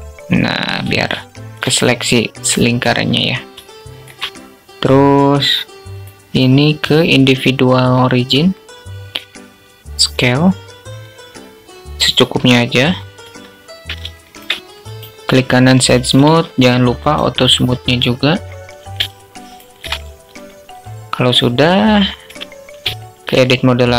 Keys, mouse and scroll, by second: 0.7 shift+click, 3.1 shift+click, 5.3-7.5 drag, 9.3 s, 12.6 Tab, 13.5 alt+shift+click, 14.2 click, 15.5 q, 18.5-18.9 alt+shift+drag, 21.6 Tab, 22.4 shift+click.